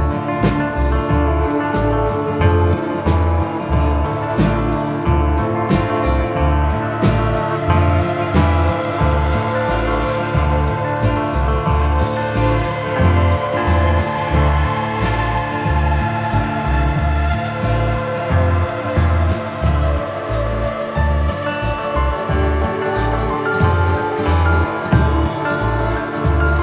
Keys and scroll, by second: 2.3 Escape.